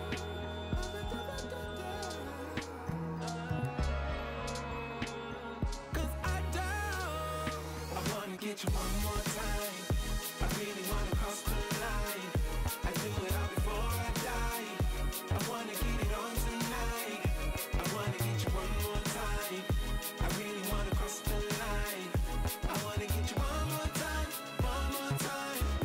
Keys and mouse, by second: 0.3 click, 0.8 space, 1.1 space, 1.3 click, 1.8 click, 2.1 space, 2.6 click, 3.2 space, 4.4 click, 4.9 click, 5.1 click, 5.3 space, 5.7 click, 6.0 space, 6.1 click, 6.3 click, 9.4 click, 9.6 KP_1, 10.4 click, 10.8 click, 11.0 click, 11.2 click, 11.6 click, 12.7 click, 14.7 space, 16.6 click, 17.4 alt+shift+click, 18.1 Return, 18.7 click, 19.1 ctrl+z, 19.4 click, 21.0 click, 21.5 alt+shift+click, 21.8 click, 22.3 click, 22.8 Return, 25.7 alt+shift+click.